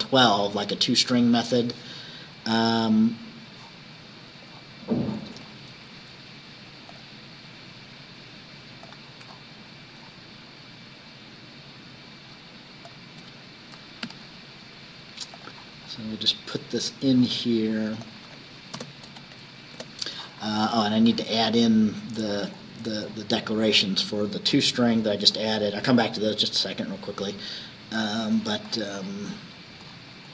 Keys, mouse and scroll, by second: 0.0-0.4 scroll up 1, 2.5-2.8 scroll down 1, 3.7 scroll down 1, 4.6 scroll down 1, 7.0 click, 8.9 click, 9.3-11.0 scroll down 5, 11.1-11.4 scroll down 2, 12.9 shift+click, 14.1 ctrl+c, 15.4 click, 15.9-16.3 scroll down 2, 17.3 scroll up 2, 18.1 click, 18.8 Return, 19.1 ctrl+v, 19.8 ctrl+Return, 20.9 scroll up 1, 21.6-22.9 scroll up 2, 23.1-23.7 scroll up 1, 23.8-24.1 scroll up 2, 24.6-25.7 scroll up 6, 26.4-26.7 scroll down 2, 28.0 click, 28.5-29.3 scroll up 2.